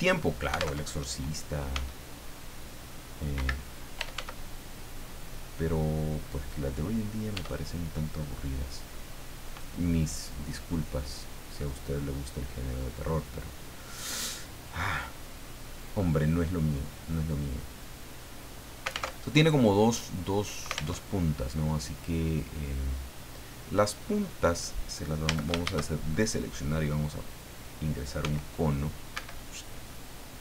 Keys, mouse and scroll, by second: 0.8 alt+Tab, 1.7 s, 3.3 Escape, 3.7-4.6 typing, 6.3 click, 7.3 e, 9.4 click, 10.7-11.8 drag, 11.9-12.3 scroll up 1, 12.4-12.7 scroll down 1, 19.1 alt+Tab, 21.0 alt+Tab, 21.9-22.9 drag, 23.0-23.6 scroll down 2, 23.7-24.0 scroll down 2, 25.2 a, 27.2 click, 28.2 s, 29.1 Escape.